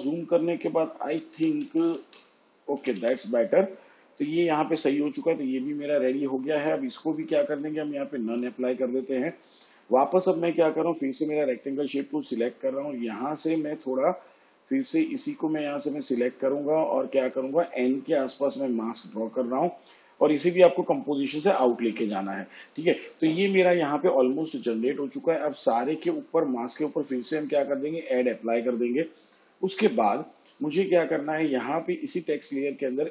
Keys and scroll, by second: 1.1 Right.